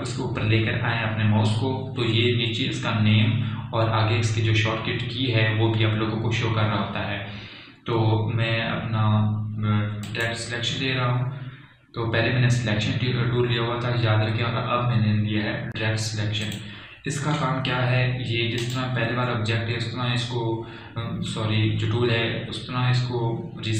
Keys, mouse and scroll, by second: 11.4 click, 17.7 click, 19.9 click.